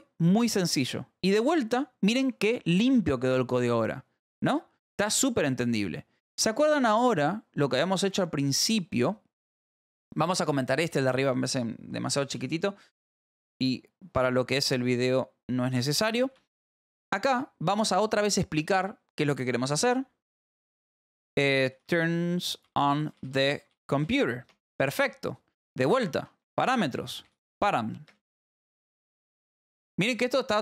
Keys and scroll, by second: 1.3 shift+[, 7.5 shift+[, 8.0 a, 9.9 Return, 10.2 Up, 10.4 Down, 12.3 /, 13.5 *, 14.1 Return, 15.7 /, 16.2 Up, 17.2 Down, 17.7 space, 20.2-24.5 typing, 25.0 Return, 26.0 Return, 26.7-29.8 typing.